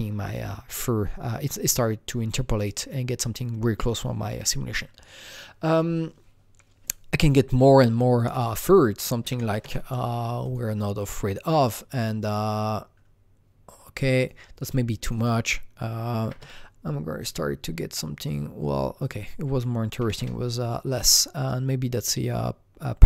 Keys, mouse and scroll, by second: 5.2 click, 5.2-6.6 scroll down 1, 8.1 click, 8.1 scroll down 1, 8.2 click, 9.4 KP_0, 9.4 KP_1, 9.6 KP_Enter, 10.4 click, 14.1 Return, 14.1 click, 14.1 KP_0, 14.2 click, 15.0 click, 15.1 double click, 16.2 KP_6, 16.4 Return, 17.2 click, 18.2 click, 19.0 click, 19.1 double click, 20.0 KP_3, 20.2 Return, 20.9 click.